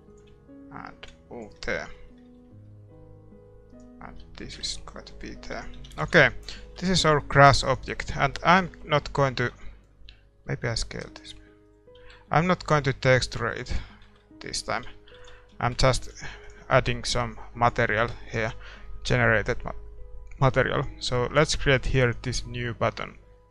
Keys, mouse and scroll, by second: 1.0-2.8 drag, 1.8 a, 1.9-4.5 middle drag, 3.7 right click, 4.1 click, 4.6 Tab, 5.5 a, 5.8 a, 6.2 ctrl+s, 7.2 ctrl+s, 7.6-9.5 right drag, 8.7-11.1 middle drag, 9.5 Tab, 10.3 s, 12.1 ctrl+r, 12.9 s, 13.7 a, 13.9-22.4 middle drag, 14.0 Tab, 14.8 a, 15.4 ctrl+s, 16.4 ctrl+s, 16.4-22.4 right drag, 22.4-23.5 drag.